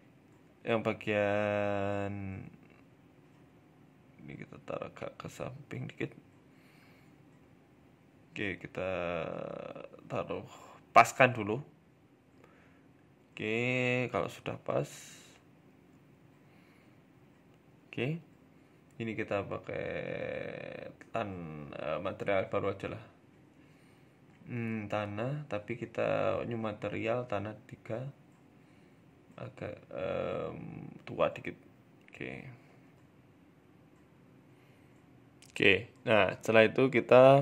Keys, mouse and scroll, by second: 0.4 click, 1.6 g, 5.3 Tab, 5.5 middle click, 5.8-6.1 scroll down 2, 6.1 middle click, 6.4 right click, 6.6 middle click, 7.2 s, 8.9 KP_7, 9.4 shift+middle click, 10.5 s, 12.1 middle click, 12.4-12.8 scroll down 3, 12.6 shift+middle click, 12.8 middle click, 13.9 scroll up 1, 14.5 scroll up 1, 16.1 right click, 17.6 right click, 17.6 click, 17.9 click, 18.9 click, 20.9 ctrl+z, 22.0 ctrl+z, 22.0 click, 25.3 click, 25.8 click, 32.1 scroll up 2, 32.3 shift+middle click, 32.9 Tab, 32.9 middle click, 32.9-33.3 scroll down 5, 32.9 s, 33.5 right click, 33.9 g, 35.7 middle click, 36.3 scroll down 3, 36.5 middle click, 37.2 scroll up 2.